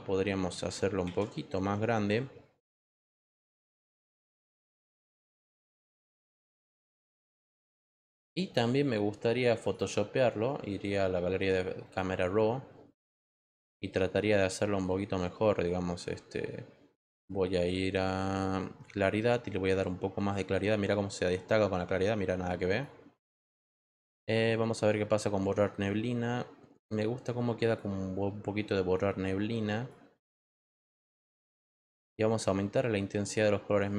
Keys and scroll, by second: 1.1 ctrl+t, 7.8 Return.